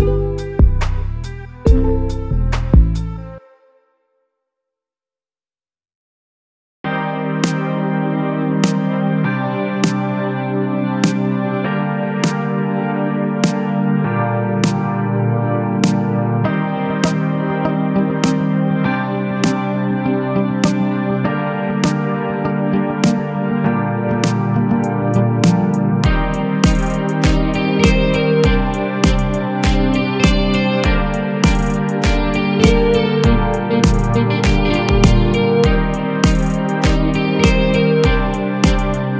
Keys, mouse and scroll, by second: 0.6 KP_1, 1.3-1.9 scroll up 4, 1.9 g, 3.4 a, 3.6 a, 3.7-4.6 scroll down 2, 4.6-7.1 middle drag, 7.1 shift+a, 11.8 a, 12.0 a, 15.1 g, 16.6 Tab, 16.9 a, 17.2 e, 18.6 a, 18.8 a, 19.0 Tab, 19.4-20.0 scroll up 2, 20.0-22.7 shift+middle drag, 22.7 Tab, 23.2 a, 23.7 Tab, 24.6 ctrl+3, 25.3 right click, 26.7 KP_Divide, 27.3 Tab, 27.9 a, 28.1 a, 28.5 ctrl+r, 29.3 a, 29.4 a, 29.8 ctrl+r, 30.8 middle click, 31.1 scroll up 2, 31.4 a, 31.6 a, 32.2 ctrl+r, 33.6 middle click, 34.2 a, 34.4 a, 34.6 click, 34.9 click, 35.5 shift+click, 35.7 shift+click, 36.1 middle click, 37.0 ctrl+b.